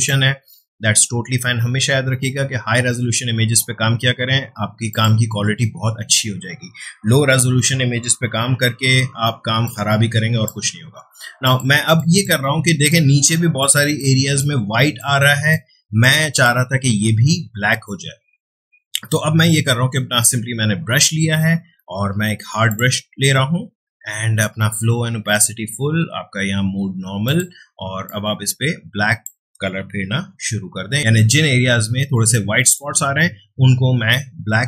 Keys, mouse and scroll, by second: 4.9 click, 8.2 ], 8.4 ], 8.6 ], 9.6-11.4 drag, 12.7 space, 12.9-19.0 ctrl+drag, 21.3 right click, 22.7 click, 27.2-30.2 drag, 30.2-30.9 typing, 31.0 ctrl+z, 32.7-34.6 drag.